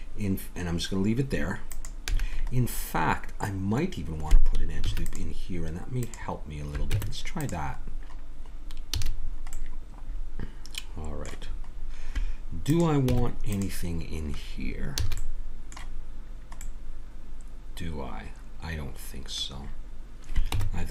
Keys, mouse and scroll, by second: 2.1 a, 2.6-4.6 middle drag, 4.8 ctrl+r, 6.9 Tab, 7.8 click, 7.9 click, 9.0 a, 12.6 click, 13.1 Tab, 14.0 middle click, 15.0 a, 16.7 middle click, 20.5 Tab.